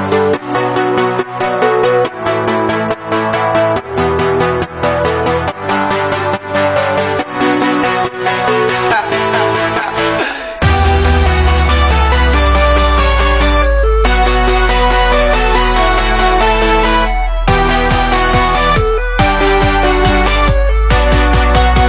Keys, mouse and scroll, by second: 0.1-1.5 drag, 2.2-4.8 drag, 5.1-6.9 drag, 7.1-7.4 scroll down 6, 7.4-8.4 middle drag, 8.4 click, 8.5 scroll down 2, 8.7-9.8 middle drag, 9.8-10.1 scroll up 4, 10.1 shift+middle drag, 10.2 scroll down 1, 10.4-11.7 middle drag, 11.7-12.3 scroll up 5, 12.0 shift+middle drag, 12.3 middle drag, 12.5-13.5 scroll down 4, 13.5 middle click, 13.7 click, 14.6 click, 15.2 click, 16.2 click, 16.6 scroll down 1, 16.6 scroll up 1, 17.9-19.7 drag, 21.0-21.8 drag.